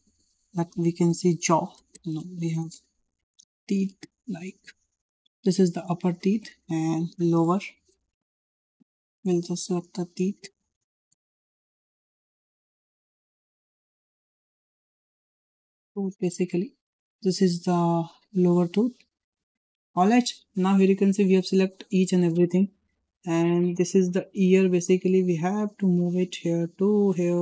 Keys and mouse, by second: 1.9 BackSpace, 6.1-12.4 drag, 9.1 BackSpace, 11.1 BackSpace, 11.2 BackSpace, 13.4 BackSpace, 15.6 o, 18.6 click, 23.2 shift+middle drag, 24.0 drag, 25.2 g, 26.4-26.9 drag.